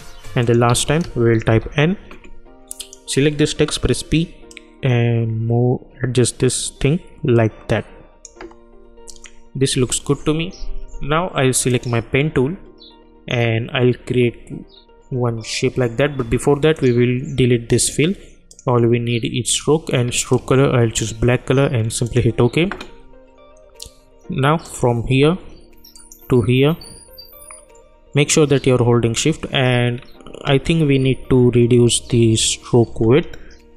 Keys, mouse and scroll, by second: 0.4 click, 0.7 ctrl+a, 1.5 shift+n, 2.8 click, 3.7 p, 4.5-9.1 drag, 9.7 u, 11.7 click, 16.7-22.0 drag, 24.6 click, 25.9 shift+click.